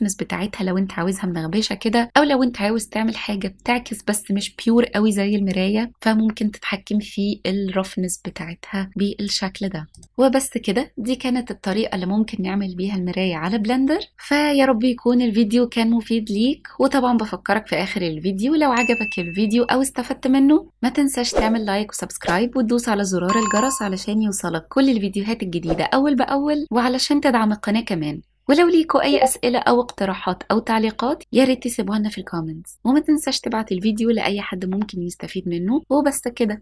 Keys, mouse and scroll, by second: 10.1 shift+middle click, 10.2 Tab, 10.3 ctrl+b, 10.4 scroll up 1, 10.7 right click, 11.0 click, 11.0-13.5 typing, 11.7 click, 11.9 click, 12.0 middle click, 12.0 click, 12.1 middle click, 12.1 scroll down 3, 12.2 click, 12.3 ctrl+p, 12.3 shift+click, 12.4 click, 12.4 click, 12.8 click, 12.9 click, 13.0 click, 13.0-13.4 scroll up 2, 13.2 click, 13.3 shift+middle click, 13.9 click, 14.0 middle click, 14.1 shift+middle click, 14.5 click, 14.6-15.3 typing, 15.0 click, 15.1 click, 15.4 click, 15.6 ctrl+s, 15.6 click, 15.7 click, 16.3 click, 16.9-18.7 typing, 17.1 click, 17.3 click, 17.4 click, 17.7 right click, 17.7 click, 18.1 click, 18.7 click, 18.8 click, 19.6 click, 19.8 ctrl+s, 19.8 click, 19.9-20.9 typing, 20.4 click, 20.7 click, 21.5 click, 22.0-22.5 typing, 22.2 click, 23.0 click, 23.1 ctrl+s, 23.6 g, 23.6 x, 23.8 click, 23.9 s, 23.9 x, 24.0 click, 24.4 shift+middle click, 24.6 ctrl+s, 24.7 click, 24.9-26.9 typing, 25.3 click, 25.5 click, 25.7 click, 26.2 click, 26.4 ctrl+s, 26.4 click, 27.0 click, 28.1-30.0 typing, 28.2 click, 28.6 click, 29.2 click, 29.3 click, 29.8 click, 30.0 click, 30.2 ctrl+s, 30.5 click, 30.7 ctrl+s, 30.9 click, 31.7 click, 31.9 click, 32.1 ctrl+z, 32.3 ctrl+s, 32.6-33.4 typing, 32.7 click, 32.7 click, 33.0 click, 33.6 click, 33.9-34.6 scroll down 9, 34.1 click, 34.2 click, 34.6 scroll up 3, 34.9 scroll down 10, 34.9 click, 35.0 click, 35.1 scroll up 9, 35.2 click, 35.4 click, 35.7-36.6 scroll down 9, 36.3 click.